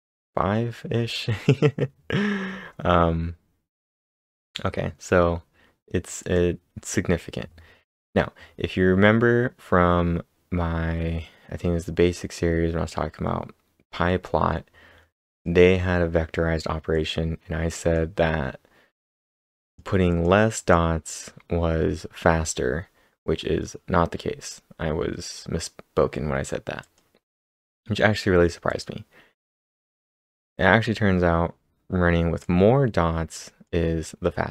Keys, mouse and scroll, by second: 2.3 click, 2.3 scroll down 1, 2.4 scroll down 4, 6.2 click, 6.2-8.3 scroll down 1, 15.3 click, 15.3-16.4 scroll down 1, 17.0 click, 17.8 click, 19.6 click, 20.1 click, 20.6-23.0 click, 26.8 click, 30.6 click, 32.4-34.5 drag.